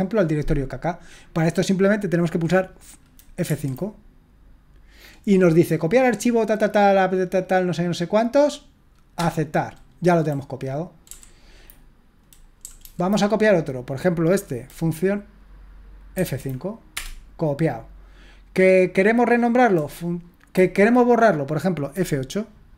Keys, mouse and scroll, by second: 3.4 F5, 9.1 Return, 11.1 Down, 12.6 Down, 12.8 Down, 16.1 F5, 16.9 Return.